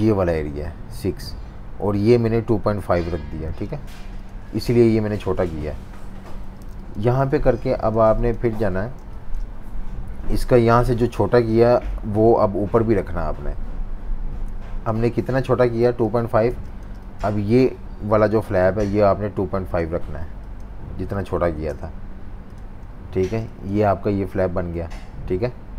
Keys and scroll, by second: 3.5-4.7 typing, 6.1 super+-, 6.7 space, 7.2 z, 7.9 v, 8.8 v, 16.5 typing, 20.7-21.9 typing, 23.2 typing.